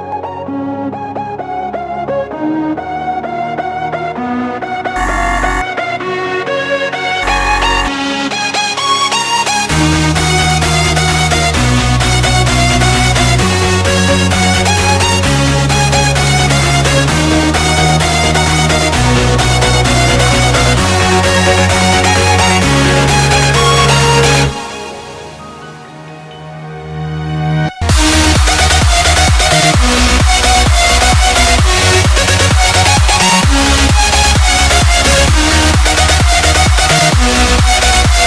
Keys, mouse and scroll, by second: 1.0 alt+click, 2.8 ctrl+d, 3.8 ctrl+d, 4.0 ctrl+d, 5.1 ctrl+d, 5.2 ctrl+d, 5.7 ctrl+d, 8.5 alt+scroll down 1, 17.5 ctrl+r, 19.5 ctrl+r, 33.4-33.7 alt+scroll up 1, 35.8 alt+scroll up 1, 36.0 ctrl+z.